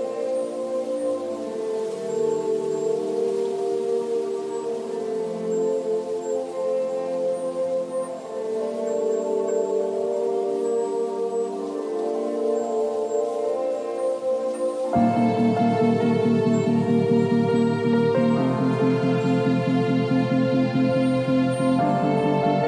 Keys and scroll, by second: 0.9 ctrl+u, 2.7 Return, 3.2 ctrl+l, 5.5 Return, 6.2 ctrl+a, 6.4 ctrl+c, 6.7 ctrl+w, 6.8 Tab, 7.2 Return, 8.5 ctrl+v, 10.1 alt+shift+m, 10.8 ctrl+t.